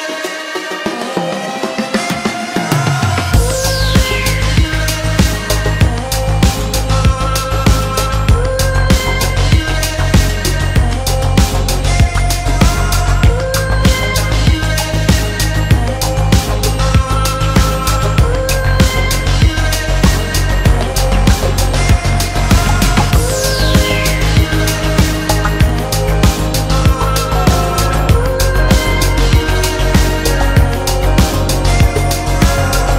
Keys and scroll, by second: 0.0 Escape, 7.8 Return, 10.8 Escape, 11.4 Delete, 12.0 F3, 14.6 Return, 15.9 Escape, 17.3 Return, 17.9 F3, 19.5 Return, 20.3 F3, 22.1 Return, 22.8 F3, 23.9 Return, 24.3 Escape, 24.8 alt+7.